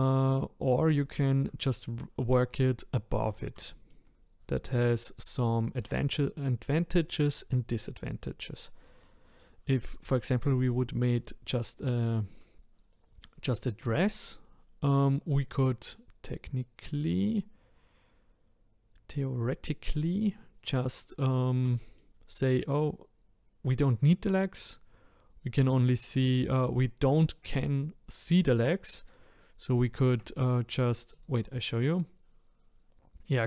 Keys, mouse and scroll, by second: 1.1-6.8 shift+middle drag, 11.9 click, 13.8 click, 17.7-20.1 scroll up 1, 20.1 click, 21.7-24.8 shift+middle drag, 29.9-31.1 shift+scroll down 1, 31.1 click, 31.5 scroll down 1, 31.5 middle click, 32.2-33.4 scroll down 2.